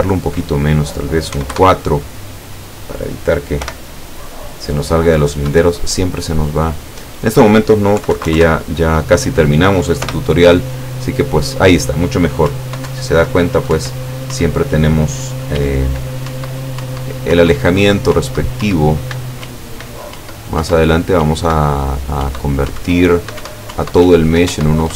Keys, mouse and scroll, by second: 1.4 KP_4, 1.6 KP_Enter, 3.6 p, 5.5 Escape, 7.0 click, 8.0 KP_3, 8.2 KP_Decimal, 8.3 KP_5, 8.4 KP_Enter, 10.1 p, 12.5 Up, 12.9 Down, 13.8 Up, 15.6 w, 16.3 Up, 17.9 w, 18.2 Up, 19.4 w, 20.2 Up, 21.3 w, 22.4 Up, 23.0 w, 23.5 Up, 24.1 w, 24.6 Up.